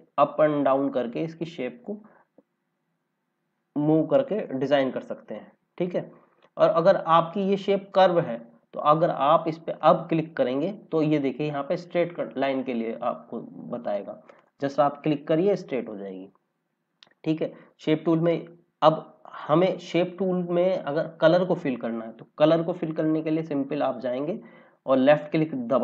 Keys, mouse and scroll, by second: 4.4 click, 9.7 click, 14.3 click, 15.5-16.0 scroll down 1, 18.0 click, 18.4 scroll down 1, 19.2 scroll up 1, 25.7 click.